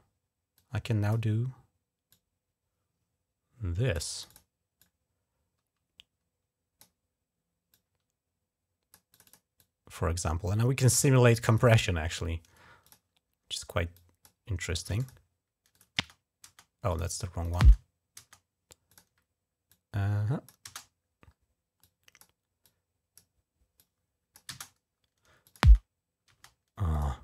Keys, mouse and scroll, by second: 0.3 click, 1.9-3.7 drag, 3.9 click, 4.0 click, 4.6-6.6 drag, 7.5-8.7 drag, 8.9 click, 9.0 click, 9.4-11.4 drag, 12.6 click, 13.7 click, 14.8 click, 15.5 click, 15.8 space, 16.2 space, 16.7 click, 17.2 click, 17.4-18.0 typing, 18.6 click, 19.5 click, 20.4 click, 20.4 typing, 21.6 click, 22.4 click, 23.6 click, 25.2 click, 26.7 click.